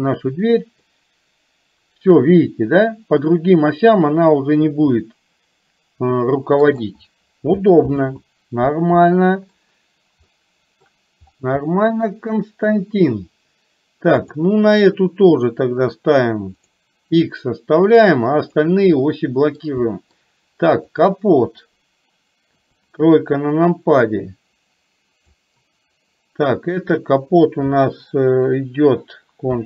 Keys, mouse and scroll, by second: 0.9-6.9 drag, 9.2 middle click, 10.4 middle click, 11.8 middle click, 19.2 middle click, 19.9 middle click, 20.9 click, 22.7 KP_3, 24.3-25.4 drag.